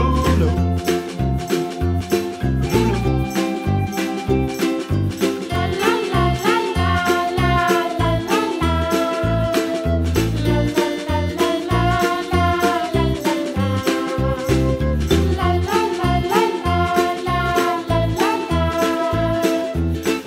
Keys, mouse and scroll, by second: 0.7 g, 3.2 click, 3.4 alt+click, 3.5 alt+click, 4.0 alt+shift+click, 4.1 alt+shift+click, 4.4 alt+shift+click, 5.8 g, 6.2 middle click, 7.8 click, 8.5-9.8 scroll up 1, 9.8 click, 11.0 alt+click, 11.9 alt+shift+click, 12.7 s, 13.6 g, 16.8 click, 17.5 alt+click, 17.9 alt+shift+click, 18.6 g.